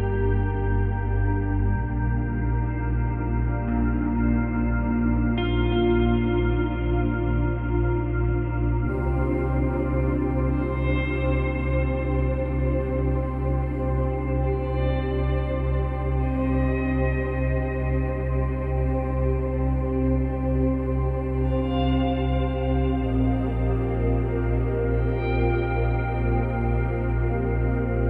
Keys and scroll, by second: 1.9 ctrl+c, 2.0 ctrl+v, 24.1 F9, 24.6 space, 27.0 space.